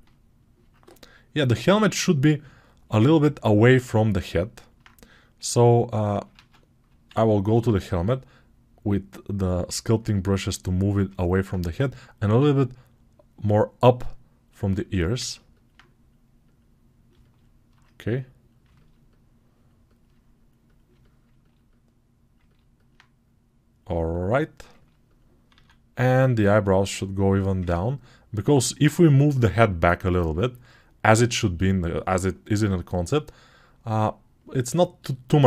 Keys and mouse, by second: 6.2 ctrl+Tab, 7.0 alt+q, 7.9-9.9 drag, 7.9-9.9 right drag, 15.0 ctrl+alt+click, 15.0 ctrl+alt+right click, 15.3 alt+click, 15.3 alt+right click, 25.5 alt+q.